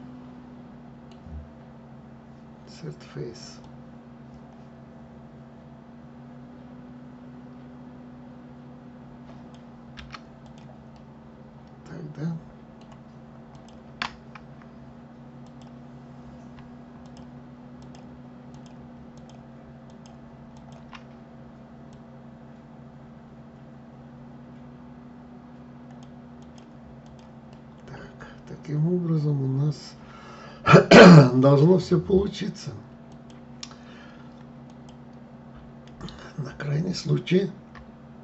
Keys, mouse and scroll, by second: 3.3 click, 9.6 Escape, 10.1 click, 10.6-13.2 middle drag, 13.2 click, 15.1 click, 16.7 shift+click, 17.4 shift+click, 18.2 shift+click, 18.8 shift+click, 19.5 shift+click, 20.2 shift+click, 21.6 click, 26.1 click, 26.7 click, 27.2-30.2 middle drag, 32.8 click, 34.3 click.